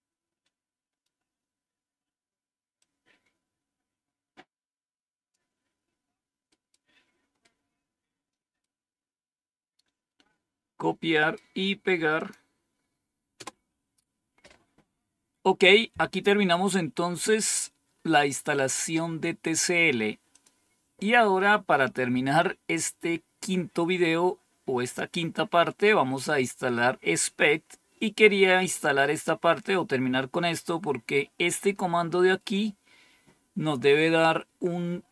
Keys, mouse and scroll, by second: 0.9 scroll down 2, 2.7-5.3 drag, 12.1 click, 13.3 Return, 15.6-16.9 scroll down 2, 16.9-19.1 scroll up 5, 20.3 click.